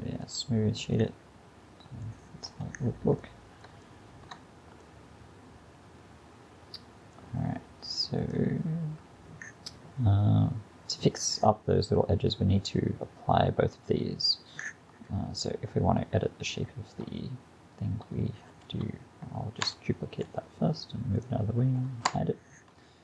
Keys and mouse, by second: 1.0-1.4 drag, 1.2 middle drag, 1.4-2.1 middle drag, 2.5 KP_Decimal, 6.8-8.3 middle drag, 18.5 shift+d, 22.1 h.